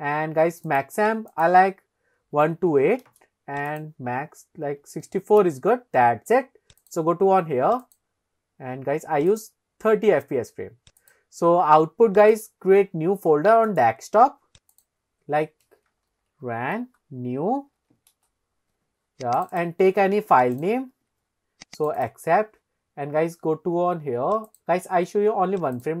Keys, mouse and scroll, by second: 1.3-3.6 drag, 4.1-6.0 drag, 6.8 click, 7.8-9.9 drag, 11.0 click, 24.5-26.0 drag.